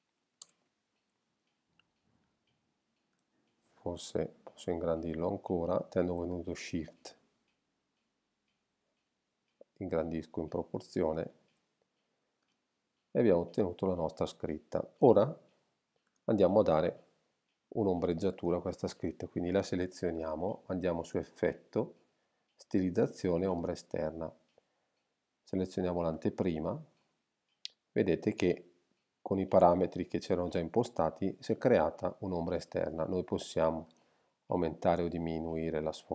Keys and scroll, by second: 0.4 shift+Return.